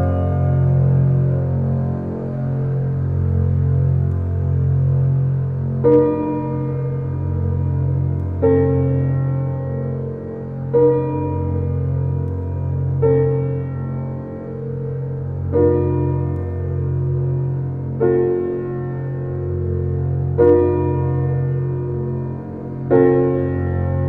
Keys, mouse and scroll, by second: 1.3-2.0 middle drag, 2.0-2.5 scroll down 3, 2.5-6.1 middle drag, 6.1 click, 7.5-8.7 middle drag, 8.7 scroll down 2, 12.8 ctrl+alt+KP_0, 21.7 scroll up 3, 21.9-22.6 middle drag, 22.6 scroll up 2, 23.2 shift+a.